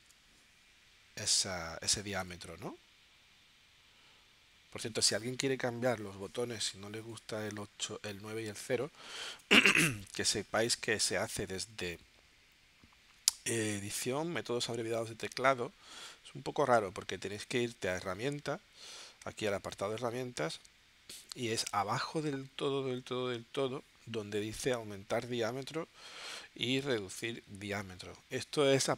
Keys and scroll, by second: 0.4 super+z, 2.2 9, 7.2 v, 9.3 BackSpace.